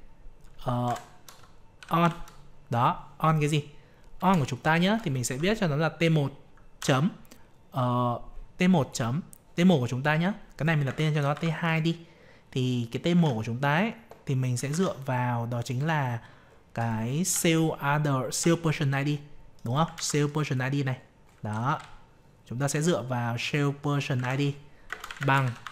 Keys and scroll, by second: 13.1 alt+Tab, 19.9 ctrl+c, 24.1 ctrl+v.